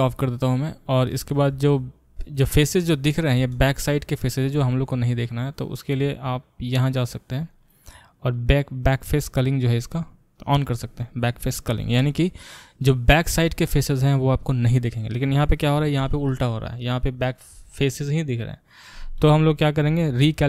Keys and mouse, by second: 0.0-6.4 middle drag, 6.4-20.4 drag.